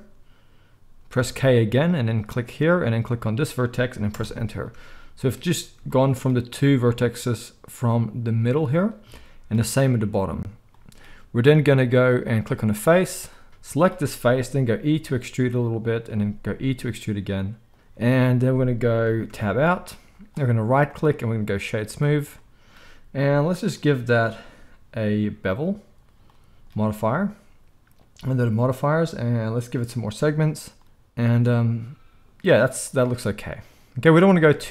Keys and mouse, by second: 1.2 k, 13.2-20.9 middle drag, 14.6 e, 16.1 e, 19.3 Tab, 20.9-23.5 right drag, 23.5 middle click, 23.6 right click, 24.1-34.7 middle drag, 34.5 z.